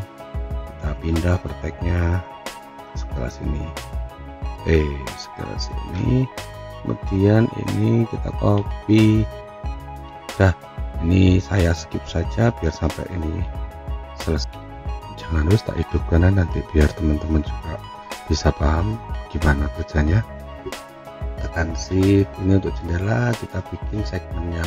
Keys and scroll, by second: 14.5 F9.